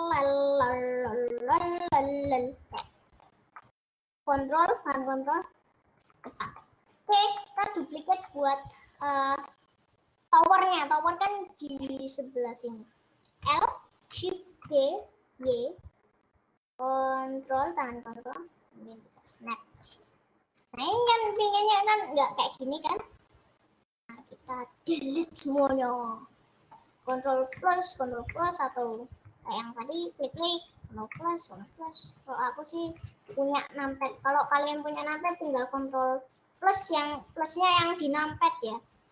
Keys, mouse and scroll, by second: 0.4 click, 0.8-2.2 typing, 2.9-5.2 middle drag, 5.2 ctrl+Left, 6.4 middle click, 7.2 click, 7.5-8.5 middle drag, 8.5-9.2 scroll up 1, 9.2-13.6 middle drag, 13.6 l, 14.6 shift+d, 21.1 scroll up 1, 22.3-24.4 middle drag, 24.4-25.4 scroll up 1, 25.4 click, 25.7-27.6 middle drag, 27.6 KP_Add, 28.4 KP_Add, 30.1-31.2 drag, 31.2 KP_Add, 31.6 KP_Add, 32.0 KP_Add.